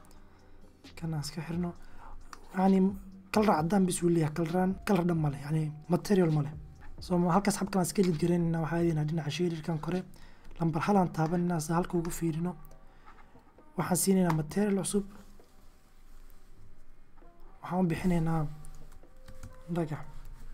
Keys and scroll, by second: 3.2 g, 6.0 c, 6.8 x, 9.6 1, 18.4-19.6 typing.